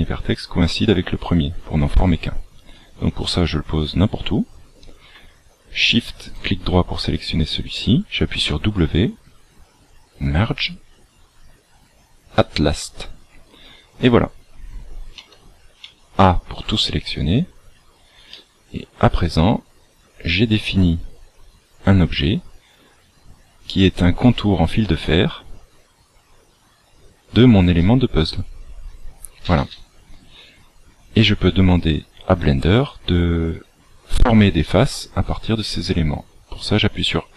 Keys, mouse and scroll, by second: 6.2 shift+right click, 8.3 w, 13.7 scroll down 1, 15.1 a, 16.8 shift+middle click, 18.3 middle click, 26.9 scroll up 3, 27.7 middle click.